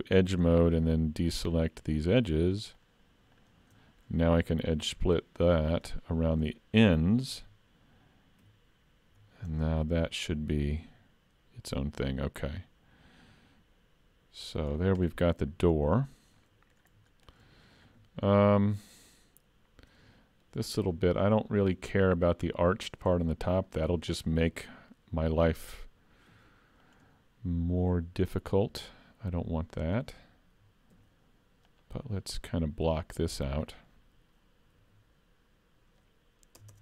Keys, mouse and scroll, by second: 1.9 shift+click, 3.9 middle click, 4.9 ctrl+e, 7.4 alt+a, 8.5 3, 9.1 l, 9.6 middle click, 10.3 click, 14.7-15.1 scroll down 3, 15.1 middle click, 15.7-16.1 scroll up 2, 16.1 shift+middle click, 16.4 middle click, 17.1 shift+middle click, 20.5 shift+middle click, 21.1 scroll up 2, 21.5 shift+middle click, 26.3 ctrl+r, 30.9 ctrl+r, 33.6 middle click, 34.8 ctrl+r.